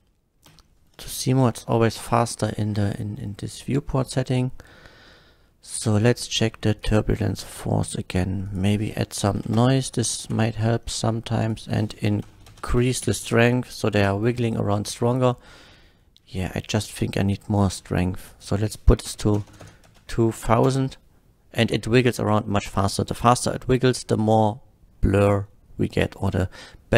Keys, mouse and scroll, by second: 0.6 h, 1.2 KP_1, 2.0 shift+Left, 5.9 click, 6.8 click, 8.5 click, 9.3 KP_4, 9.4 Return, 10.2 shift+Left, 11.4 click, 12.0 KP_8, 12.2 KP_0, 12.5 Return, 13.0 shift+Left, 14.5 click, 14.8 space, 16.0 middle click, 18.3 click, 19.1 KP_2, 19.3 KP_0, 19.8 Return, 19.8 KP_0, 20.3 shift+Left, 20.6 space.